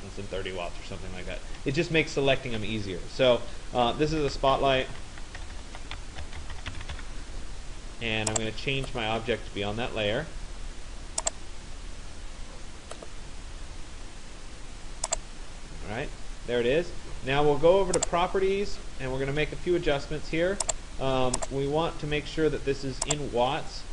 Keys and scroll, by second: 5.0 BackSpace.